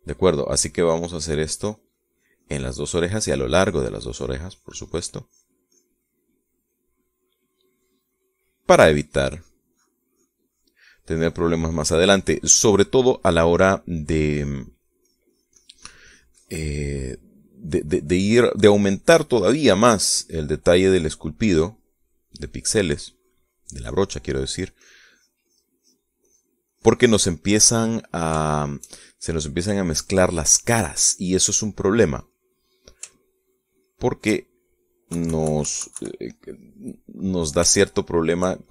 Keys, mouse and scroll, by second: 1.0-5.0 drag, 5.1 click, 5.7 click, 6.7-7.8 drag, 8.0 middle click, 9.0 middle click, 9.8 click, 10.3 click, 13.2 middle click, 14.1 middle click, 15.0-18.4 drag, 18.6-20.5 drag, 21.1 click, 21.9 click, 22.4-23.6 drag, 24.1-27.1 drag, 27.2 click, 28.4 middle click, 29.4-30.8 shift+middle drag, 31.2-32.2 drag, 32.4 middle click, 33.3 middle click, 34.1 shift+middle click, 36.1 KP_Subtract, 37.6-38.7 middle drag.